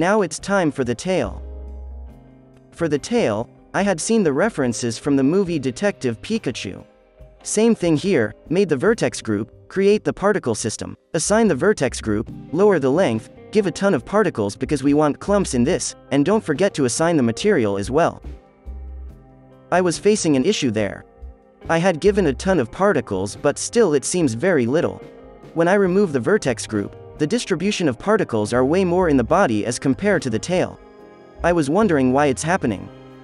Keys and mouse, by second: 0.0 h, 0.8 ctrl+l, 1.2 alt+h, 2.2-6.2 drag, 2.6 Tab, 7.2-9.9 drag, 10.9-13.3 drag, 13.4-17.4 drag, 15.6 KP_0, 15.8 KP_0, 17.0-19.8 middle drag, 18.8 KP_7, 19.8 KP_3, 20.8 z, 22.6-28.1 drag, 26.8 z, 27.4-29.3 middle drag, 28.1 ctrl+z, 29.9-31.7 drag, 32.5-33.2 drag.